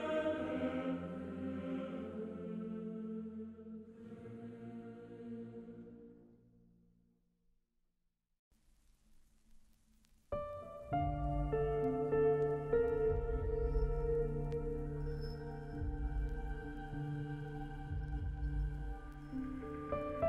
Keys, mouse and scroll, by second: 16.0 ctrl+alt+shift+e.